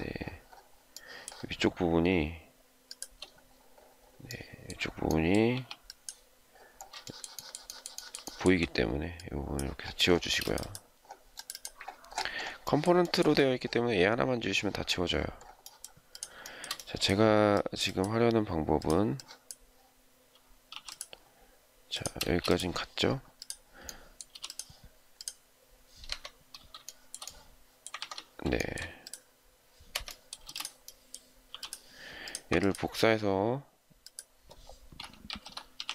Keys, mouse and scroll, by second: 0.9 shift+middle click, 2.7 shift+click, 5.4 e, 6.9 shift+middle click, 7.2 shift+middle click, 7.4 shift+double middle click, 7.5 shift+middle click, 7.9 shift+middle click, 8.0 shift+double middle click, 8.2 shift+middle click, 10.1 space, 12.9 shift+middle click, 13.1 shift+double middle click, 16.3 shift+middle click, 20.6 m, 22.1 space, 24.2 m, 25.9 Escape, 26.8 shift+middle click, 27.9 ctrl+z, 28.5 shift+middle click, 29.8 Escape, 30.4 space, 31.4 m, 32.4 ctrl+click, 35.5-35.9 typing.